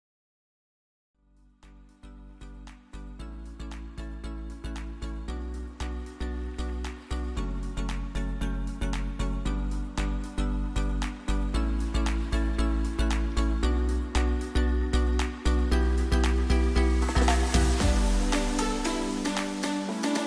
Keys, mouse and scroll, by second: 4.3 click, 4.4 Up, 5.8 click, 6.1 Up, 6.9 click, 10.1 alt+click, 12.3 t, 12.5 click, 13.4-13.9 typing, 14.9 click.